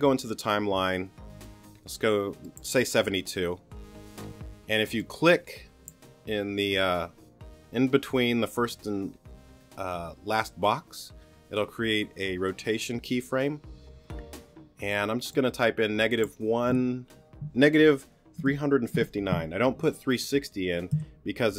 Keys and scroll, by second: 18.4 3, 20.9 Return.